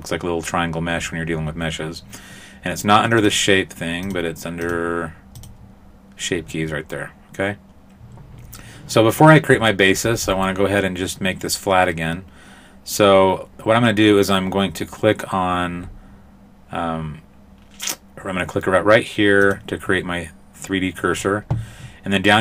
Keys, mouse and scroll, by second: 3.2 click, 4.1 click, 4.7 click, 5.4 click, 12.9-14.1 scroll up 2, 14.1-14.4 scroll up 1, 19.5 click.